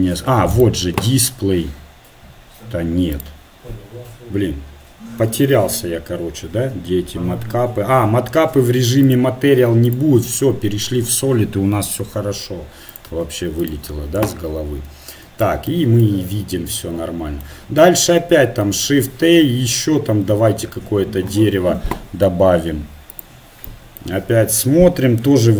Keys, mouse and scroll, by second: 11.8-12.9 middle drag, 12.9-14.4 drag.